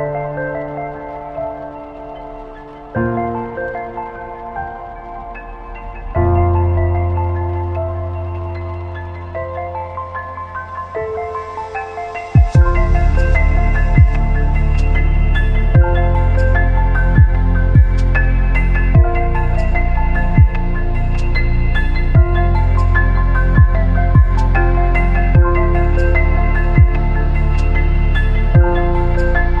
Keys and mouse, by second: 0.0-2.7 typing, 0.1 click, 0.9 click, 1.7 click, 2.5 click, 3.4 middle click, 3.9 shift+middle click, 4.6 click, 4.7-9.6 typing, 5.4 click, 6.1 click, 6.9 click, 7.8 click, 8.6 click, 9.4 click, 10.4 middle click, 11.6 click, 11.8 g, 12.9 click, 12.9 right click, 13.3 click, 13.5-17.4 typing, 14.2 click, 14.9 click, 15.7 click, 16.5 click, 17.3 click, 18.2 middle click, 18.8 shift+middle click, 19.1 middle click, 19.7 click, 19.9-24.3 typing, 20.5 click, 21.1 click, 21.8 click, 22.6 click, 23.3 click, 24.1 click, 25.1 middle click, 25.7-27.8 middle drag, 28.0 shift+middle click, 28.9 click, 29.0-29.6 typing.